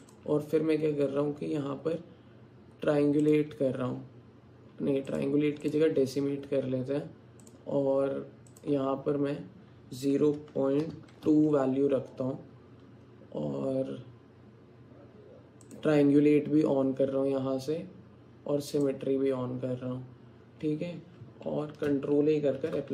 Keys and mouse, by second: 0.0-3.4 drag, 5.6-7.6 drag, 11.1 click, 15.7 click, 18.8-21.9 drag, 22.6 ctrl+a.